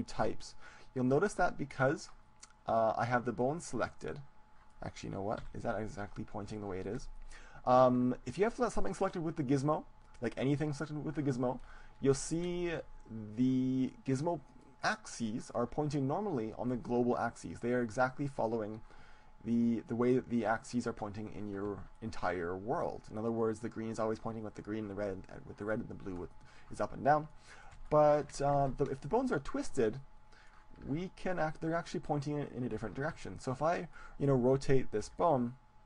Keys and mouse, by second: 3.4-5.3 middle drag, 5.5 KP_7, 6.4-8.3 middle drag, 8.7-13.1 right drag, 12.4 click, 12.9-17.4 middle drag, 22.1-23.7 middle drag, 27.3-31.9 middle drag, 29.3-31.7 drag, 33.7-35.7 middle drag, 35.7 r.